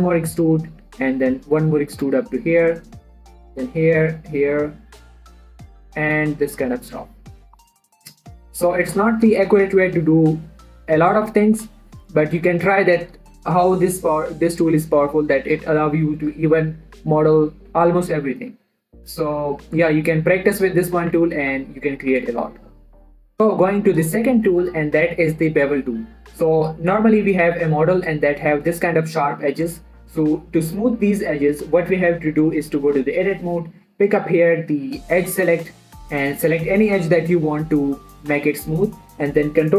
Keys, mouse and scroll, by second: 0.2 scroll down 1, 0.4 click, 1.2 e, 2.4 click, 2.7 middle click, 3.4 click, 3.5 e, 4.2 click, 4.3 e, 4.9 click, 5.8 e, 6.5 click, 6.8 middle click, 7.9 click, 8.2 middle click, 8.5 e, 9.2 click, 13.0 middle click, 19.2 middle click, 19.7 shift+middle click, 20.8 scroll down 1, 21.0 middle click, 21.5 Tab, 22.0 middle click, 22.5 click, 23.3 middle click, 27.3 scroll down 1, 27.5 scroll up 1, 27.6 middle click, 28.1-28.6 scroll up 1, 28.6 middle click, 30.8 click, 35.0 click.